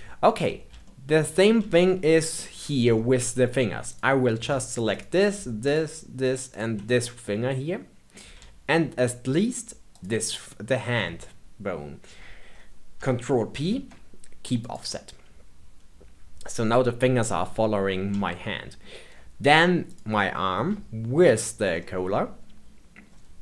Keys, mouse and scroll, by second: 0.3 click, 0.8-2.6 shift+middle drag, 2.6 scroll up 2, 2.9-3.8 shift+middle drag, 3.8 click, 4.9 shift+click, 5.6 shift+click, 6.4 shift+click, 6.8-9.9 middle drag, 9.9 shift+click, 13.6 ctrl+p, 18.2-19.8 shift+middle drag, 19.8 click, 21.2 shift+click, 21.7-23.4 middle drag.